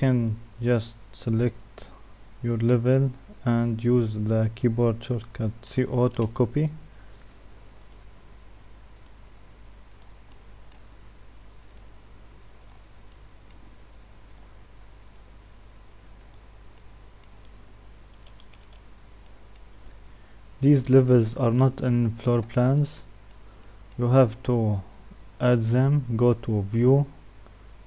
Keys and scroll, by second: 5.4-6.1 typing.